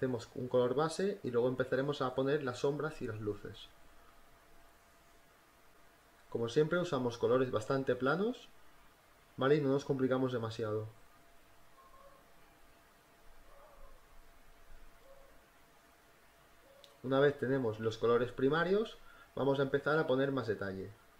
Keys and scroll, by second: 0.0-1.9 typing, 3.9 e, 4.7 space, 4.9 space, 5.0 b, 6.2 ctrl+z, 6.4 ctrl+z, 6.6 space, 7.2 [, 7.3 ], 8.6 e, 9.7-14.7 typing, 15.8-19.9 typing, 20.9-21.1 typing.